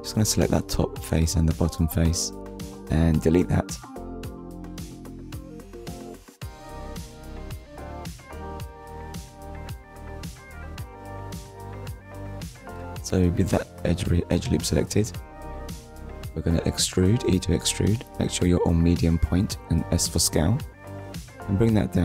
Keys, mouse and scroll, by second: 1.1 shift+click, 2.2 Delete, 3.4 click, 4.0 middle click, 6.8 click, 7.4 shift+middle click, 7.9 middle click, 9.3 alt+click, 12.2 right click, 14.9 right click, 16.7 click, 17.6 click.